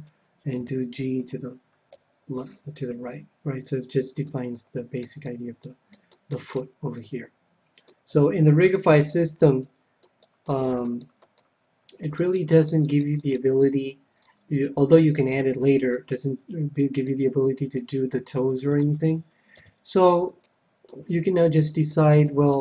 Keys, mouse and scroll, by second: 0.0-2.7 drag, 0.5 g, 1.9 a, 2.5-8.5 middle drag, 8.0 KP_1, 8.8-9.6 scroll down 1, 9.6-18.7 middle drag, 19.5 KP_7, 20.3-22.6 middle drag.